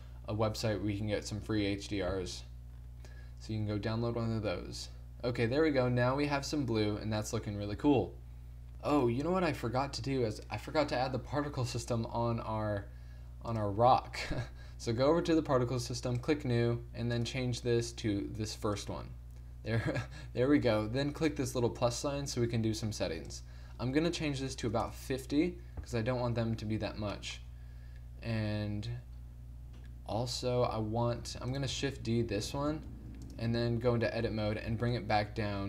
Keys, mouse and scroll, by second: 1.6 shift+z, 8.7 z, 13.5-15.5 drag, 15.5 middle click, 16.4-19.0 drag, 21.3-25.1 drag, 29.2 middle click, 30.6 2, 32.5 shift+d, 33.8 Tab, 34.5 g.